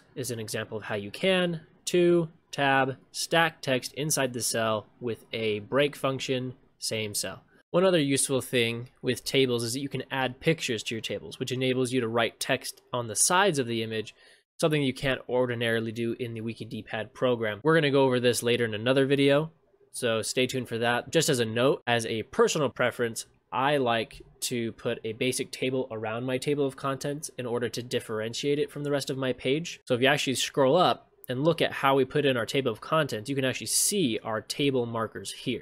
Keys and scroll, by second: 7.6 ctrl+v, 24.1 ctrl+c, 29.8 ctrl+v.